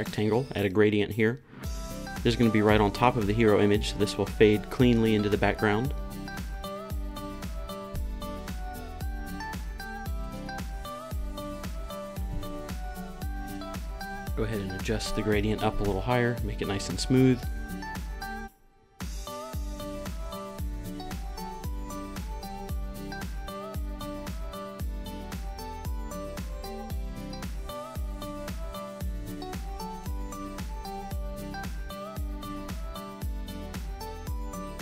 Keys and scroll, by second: 2.4 super+v, 2.5 Return, 21.8 Down.